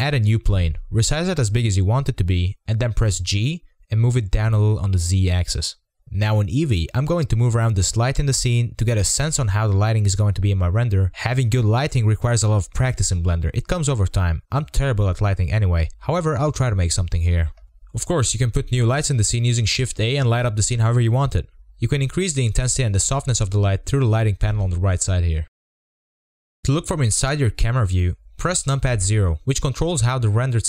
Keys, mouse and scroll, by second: 1.8 shift+a, 3.0 s, 3.4 scroll down 4, 3.5 s, 4.1 scroll up 1, 4.2-4.7 middle drag, 4.7 g, 5.8-6.2 scroll up 2, 6.2-8.8 middle drag, 8.8 click, 9.3-10.7 scroll down 6, 12.0 click, 12.3 middle click, 13.1 click, 13.4 g, 14.0-14.4 middle drag, 14.4 g, 15.0-16.0 middle drag, 16.0 g, 18.5-20.4 drag, 20.4 0, 21.0-21.6 scroll down 4, 21.6-22.1 middle drag, 22.1 click, 22.3 g, 23.0-23.5 middle drag, 23.5 g, 24.0-24.4 middle drag, 24.4 g, 25.6-26.0 middle drag, 26.0-26.5 scroll up 2, 26.5 KP_0.